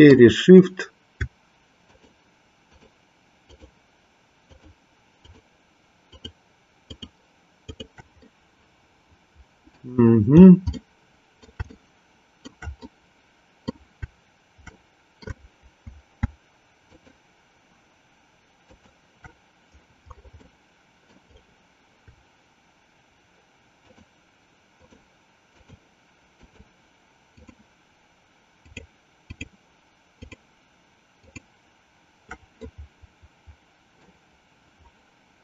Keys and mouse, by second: 2.7 shift+click, 3.6 shift+click, 4.6 shift+click, 5.5 shift+click, 6.2 shift+click, 7.0 shift+click, 7.9 shift+click, 8.4-10.0 middle drag, 10.7-12.6 middle drag, 12.9 middle click, 14.7-16.4 middle drag, 16.9 shift+click, 18.7 shift+click, 20.5 middle click, 23.7 shift+click, 25.0 shift+click, 25.6 shift+click, 26.5 shift+click, 27.5 shift+click, 28.6 shift+click, 29.5 shift+click, 30.2 shift+click, 31.2 shift+click, 32.7-34.1 middle drag.